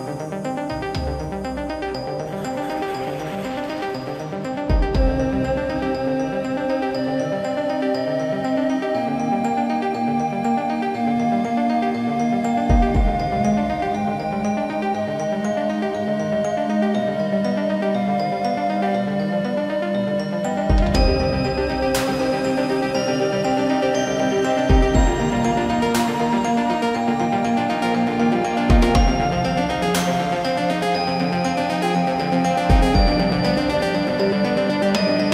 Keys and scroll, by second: 5.0-6.4 typing, 11.2 space, 11.8 shift+r, 12.0 space, 13.0 ctrl+g, 16.4 r, 19.1 space, 20.2 ctrl+g, 33.6 f.